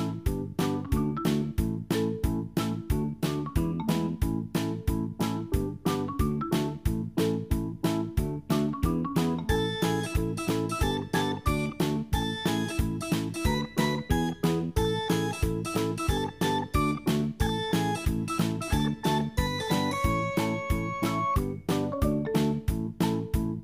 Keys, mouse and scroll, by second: 3.0 click, 6.7 click, 11.4 click, 13.2 scroll down 2, 14.7 click, 17.8 click, 19.1-19.6 scroll down 2, 22.6-23.6 drag.